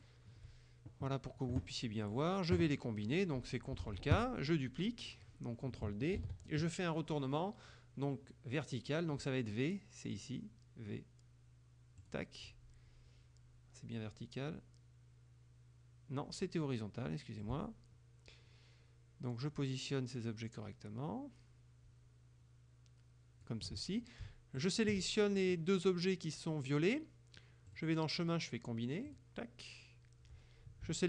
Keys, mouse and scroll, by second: 0.0 shift+click, 3.9 ctrl+k, 6.2 ctrl+d, 12.1 click, 17.5-23.7 ctrl+drag, 24.6 shift+click, 27.8 click, 29.1 click.